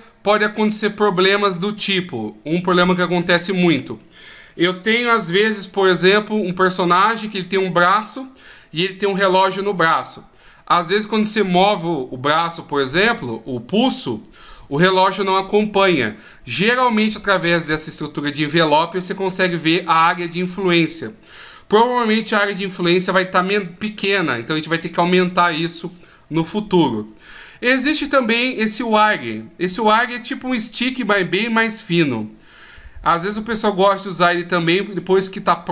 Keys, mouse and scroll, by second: 29.0 click, 30.5 middle click, 33.2 right click, 34.0 right click, 34.6 right click, 35.3 right click.